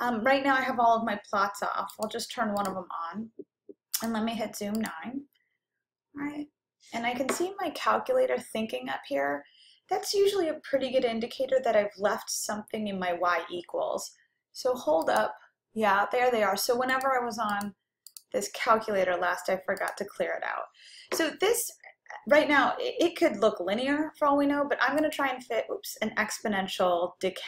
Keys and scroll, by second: 2.0 Return, 2.7 Return, 4.9 9, 17.6 Down.